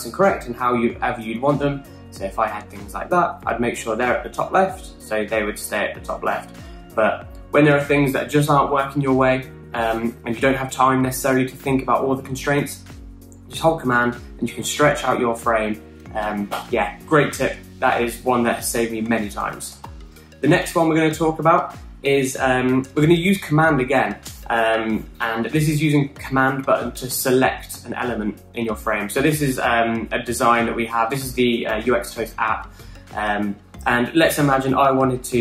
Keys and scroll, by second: 6.8 super+z, 19.9 super+z, 20.3 super+z, 21.1 super+z.